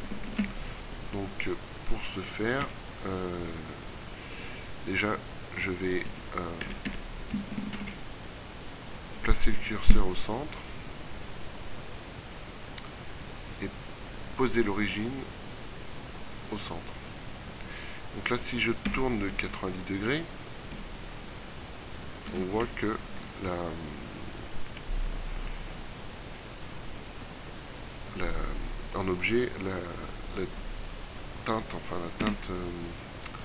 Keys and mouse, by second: 0.3 ctrl+w, 2.1 KP_3, 6.2 Tab, 6.8 a, 7.0 a, 7.8 shift+s, 10.0 Tab, 19.0 r, 22.4 r.